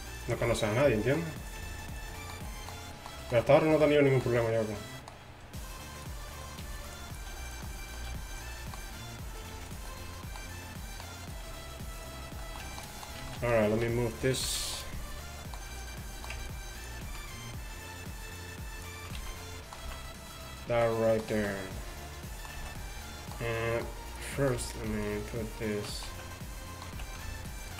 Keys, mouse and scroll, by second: 0.5 g, 1.7 g, 2.2 middle click, 6.7 g, 7.4 g, 8.5 g, 9.6 g, 11.5 g, 13.3 z, 13.8 z, 14.1 middle click, 14.4 z, 14.9-16.3 middle drag, 17.1 ctrl+z, 19.2 z, 19.9 z, 21.4 z, 22.6 z, 24.1-26.1 middle drag, 27.0 z.